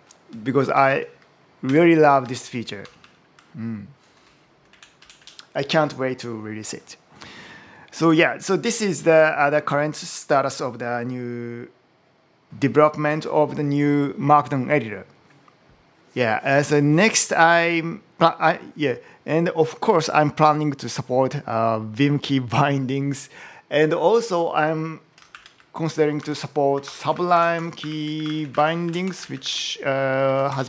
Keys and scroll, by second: 0.6 Up, 1.5 alt+Right, 2.0 super+Right, 2.3 super+Left, 2.6 super+Up, 3.9 Right, 4.8 Down, 25.1 ctrl+shift+super+m, 26.0 super+t, 26.3-30.6 typing.